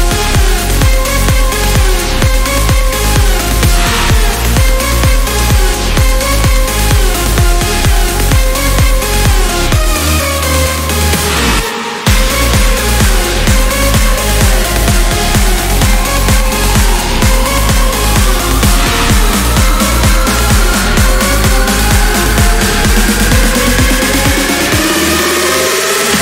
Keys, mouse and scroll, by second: 0.0 ctrl+click, 1.4 click, 4.4 scroll down 2, 4.8-5.1 scroll up 2, 6.6-6.9 scroll down 2, 7.0 click, 9.6 ctrl+click, 11.7 ctrl+click, 13.6 ctrl+click, 15.4 ctrl+click, 17.6 click, 20.0 click, 21.6 8, 22.0 0, 25.8 click.